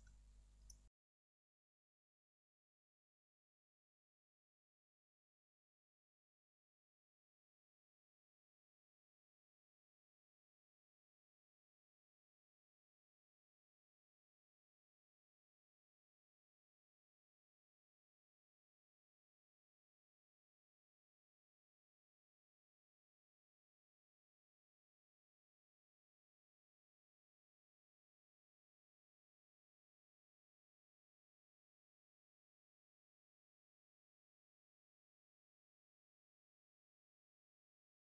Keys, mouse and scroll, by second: 0.7 click, 0.9 scroll down 1, 1.0-2.6 alt+middle drag, 1.3 scroll up 1, 1.5 Tab, 1.8 g, 2.6 click, 2.8-5.3 alt+middle drag, 3.1 scroll down 1, 3.4 alt+q, 4.1 ctrl+a, 4.2 alt+q, 5.3 click, 5.8 ctrl+click, 6.9 ctrl+KP_Subtract, 7.3-8.0 alt+middle drag, 8.0 click, 8.4-9.0 alt+middle drag, 9.0 click, 9.5 Escape, 10.3 space, 10.7 click, 10.9 g, 11.7 click, 11.7 z, 11.9-14.5 alt+middle drag, 12.1-12.5 scroll up 2, 12.5 g, 14.5 click, 14.6 scroll down 1, 14.8 click, 15.0-18.6 alt+middle drag, 15.1 scroll down 1, 15.8 scroll down 1, 16.0 scroll up 1, 16.6 scroll down 1, 17.3-17.7 scroll up 2, 18.4 scroll up 2, 18.6 click, 18.7-24.0 alt+middle drag, 19.5 q, 20.2 q, 21.3-22.0 scroll down 2, 22.0-22.7 scroll up 2, 22.7 q, 24.0 click, 24.1 z, 24.5-26.8 middle drag, 24.6-25.3 scroll up 2, 25.3 q, 26.8 shift+click, 26.9 scroll up 2, 27.1-28.3 alt+middle drag, 27.4-28.0 scroll down 4, 28.2 scroll up 2, 28.6 scroll down 1, 28.9 alt+middle click, 29.4 middle click, 29.8 click, 30.0 alt+q, 30.4 middle click, 36.7 alt+middle click, 36.9-38.1 scroll up 2, 37.2 middle click.